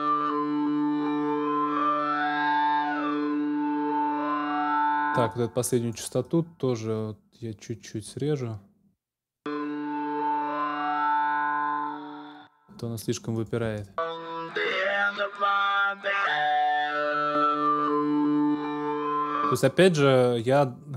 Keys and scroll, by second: 1.3 super+s, 4.8 space, 9.1 space, 12.3 space, 13.6 space, 19.1 space.